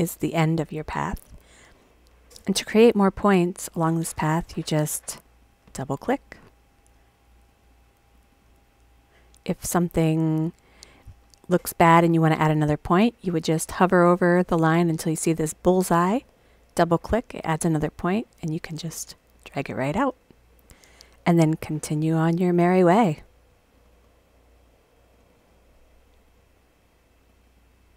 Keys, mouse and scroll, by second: 5.2 click, 5.3-6.2 scroll up 4, 5.4 click, 6.2 click, 6.2-7.3 scroll up 4, 6.3 click, 7.3 click, 7.4 click, 8.1 click, 8.3 click, 16.2 click, 16.4 click, 18.4-19.3 drag, 20.6 click, 20.7 click, 21.9 click, 22.0 click, 22.8 click, 22.9 click, 23.7 click, 23.9 click, 25.1 click, 25.3 click, 26.0 click, 26.2 click, 27.3 click, 27.4 click.